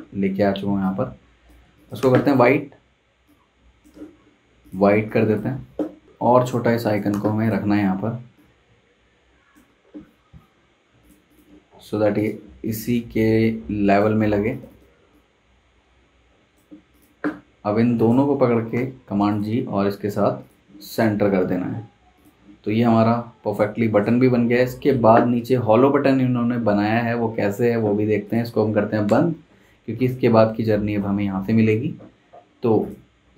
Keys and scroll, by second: 1.6 z, 2.0 v, 6.6 z, 7.1 v, 14.2 super+z, 18.7 super+g, 29.0 BackSpace.